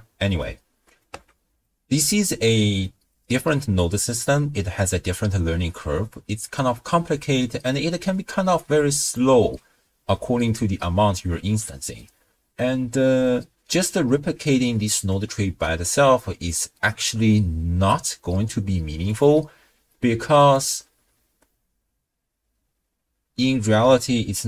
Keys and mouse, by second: 0.4 middle click, 1.8-2.8 ctrl+middle drag, 3.1-4.4 middle drag, 7.9 d, 8.4 d, 8.5-9.4 d, 8.7 click, 14.1 middle click, 15.2-16.5 drag, 19.0 click, 20.4 click.